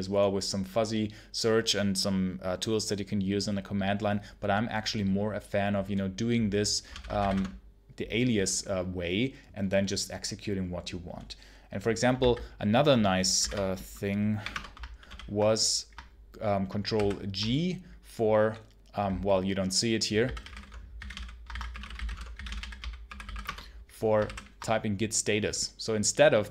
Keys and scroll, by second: 6.8 ctrl+l, 6.8-7.6 typing, 12.0 ctrl+c, 13.3 d, 13.3 Return, 14.3 1, 14.4 Return, 14.9 ctrl+l, 16.8 ctrl+g, 19.9-23.7 typing, 24.1 ctrl+g, 26.2-26.5 typing.